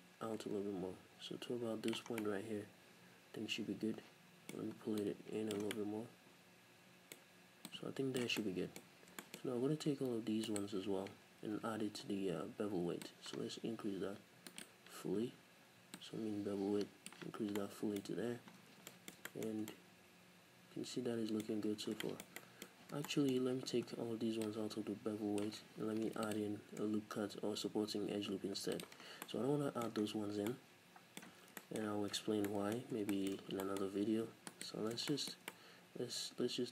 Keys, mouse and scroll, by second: 2.2-5.0 middle drag, 5.0 click, 5.7-7.7 middle drag, 7.7 click, 8.4-10.5 middle drag, 8.8-10.4 scroll up 4, 10.4 scroll up 1, 10.5 alt+right click, 11.5 n, 13.0-14.6 drag, 14.6 right click, 16.0-17.6 drag, 17.4 scroll down 2, 17.6-18.6 middle drag, 18.3-18.6 scroll down 2, 18.9 shift+middle click, 19.6 Tab, 21.5-24.4 middle drag, 21.5-22.0 scroll up 2, 22.6-22.9 scroll up 2, 22.9 Tab, 23.4-24.4 scroll up 2, 24.4-28.8 drag, 25.9 ctrl+r, 29.0 scroll down 2, 29.3 middle click, 30.0-30.4 scroll down 2, 30.4 Tab, 30.5-31.5 middle drag, 31.5 scroll down 2, 31.6-34.5 shift+middle drag, 32.1 n, 32.8-33.2 scroll up 2, 33.5 Tab, 33.9-34.5 scroll up 2, 34.5 alt+right click, 34.9 scroll down 2, 35.1-36.7 shift+middle drag.